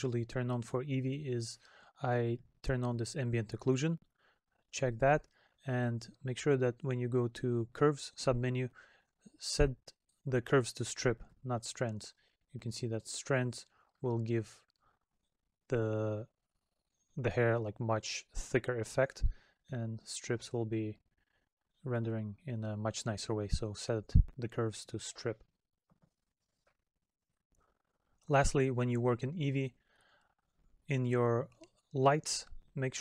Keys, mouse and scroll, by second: 14.4 middle click, 16.8 middle click, 20.4 middle click, 21.6 middle click.